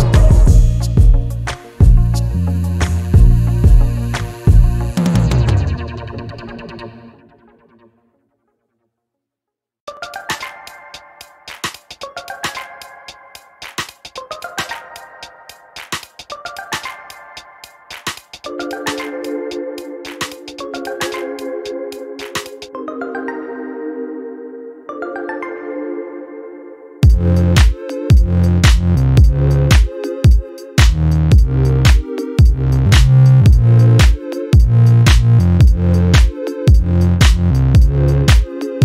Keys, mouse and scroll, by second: 2.0 shift+click, 3.7 space, 4.6 click, 4.9 click, 5.0 middle click, 5.5-6.1 ctrl+scroll up 4, 6.7 ctrl+click, 8.2-11.7 drag, 12.3 Delete, 14.5-15.8 drag, 15.9 space, 17.2 click, 17.7 click, 19.0 ctrl+d, 20.1 shift+click, 21.5 ctrl+KP_Subtract, 22.7-23.2 ctrl+scroll down 2, 23.6 ctrl+space, 24.7 ctrl+click, 25.2-25.7 ctrl+scroll up 2, 26.6-27.1 ctrl+scroll down 2, 27.5 ctrl+space, 28.5 scroll up 4, 29.0 space, 29.5 click, 31.3 d, 32.3-34.9 drag, 35.3 click, 36.5 d.